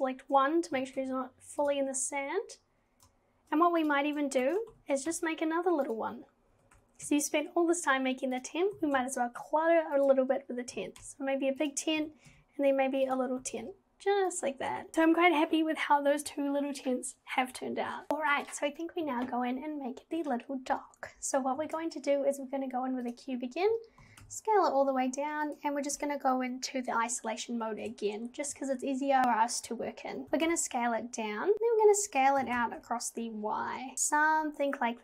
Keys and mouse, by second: 0.7 g, 4.5 shift+d, 4.7 g, 6.5 g, 8.8 g, 10.8 g, 12.0 g, 13.4 g, 21.6 shift+a, 24.0 g, 26.0 /, 30.2 g.